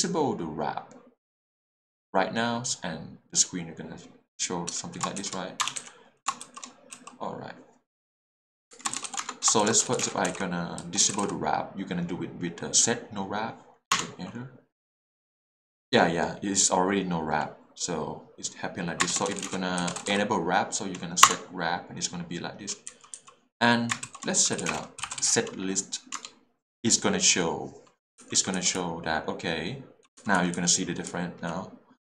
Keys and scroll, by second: 5.2 shift+n, 5.6 BackSpace, 5.8 n, 8.7 shift+Escape, 9.1-11.2 typing, 9.2 Return, 13.9 Return, 19.3-20.0 typing, 21.2 p, 21.3 Return, 22.9 k, 23.1 j, 24.5-26.1 typing, 26.2 Return, 28.2 k, 28.7 h, 30.2 j, 31.1 h.